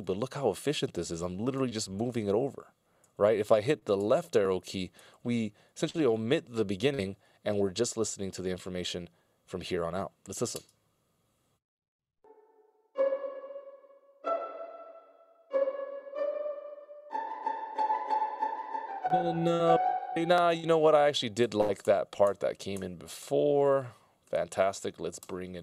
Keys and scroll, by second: 2.9 ctrl+alt+Left, 4.2 ctrl+alt+Left, 4.8 ctrl+alt+Left, 5.8 ctrl+alt+Left, 10.5 space, 18.5 space, 21.6 ctrl+alt+Right, 22.4 ctrl+alt+Right, 24.4 ctrl+alt+Right, 24.9 ctrl+alt+Right, 25.4 ctrl+alt+Right.